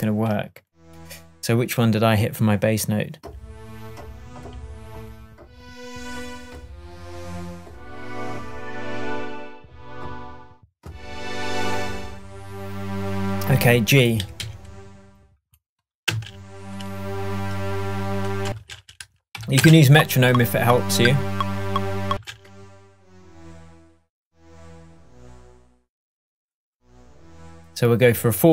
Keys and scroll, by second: 14.2 Up, 16.1 space, 18.5 space, 22.1 space.